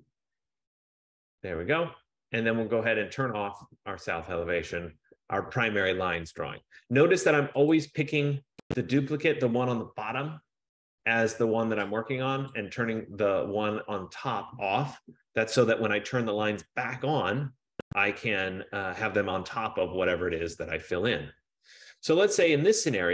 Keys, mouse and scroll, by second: 0.0-0.7 typing, 1.9-2.6 typing, 3.8 click, 8.6 click, 12.7 click, 20.2 F15.